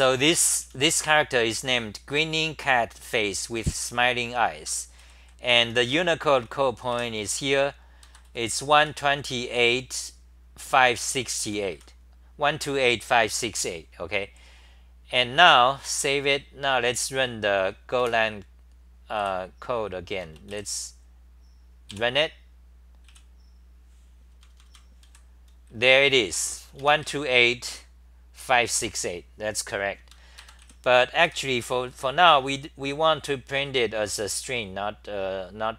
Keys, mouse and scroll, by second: 0.0-1.4 typing, 4.6 ctrl+g, 5.0 d, 5.6 t, 5.8-6.4 c, 6.9 2, 8.0 ctrl+g, 8.6 g, 8.8 g, 9.3 r, 9.5 r, 11.4 h, 11.7 1, 15.9 Home, 18.0 super+w, 19.2 w, 23.0 w, 24.3 super+=, 24.8-27.5 typing, 30.4 ctrl+g, 30.6 w, 31.2 g, 34.4 l.